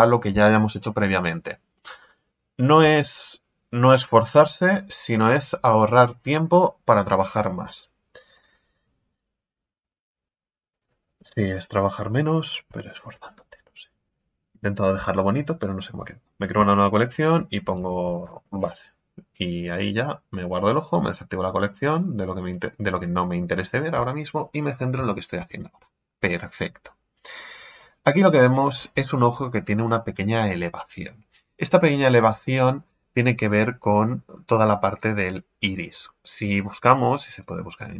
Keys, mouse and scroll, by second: 10.7 click, 11.0 click, 11.7-12.7 right drag, 12.7 m, 20.9 click, 22.6 click, 23.8-24.9 right drag, 24.9 KP_1, 25.4 Tab, 26.0-26.7 scroll up 2.